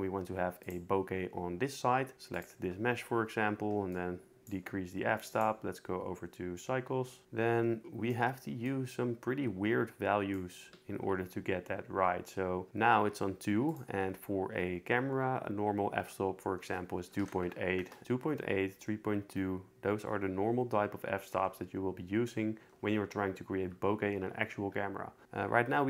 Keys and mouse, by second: 2.3 click, 3.9 click, 7.2 shift+click, 8.7-10.3 shift+drag, 13.8-17.8 drag.